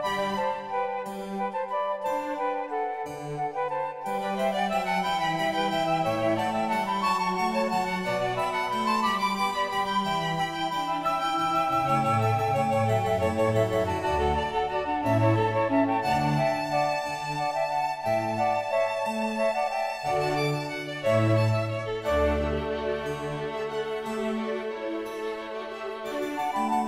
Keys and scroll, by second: 3.2 ctrl+t.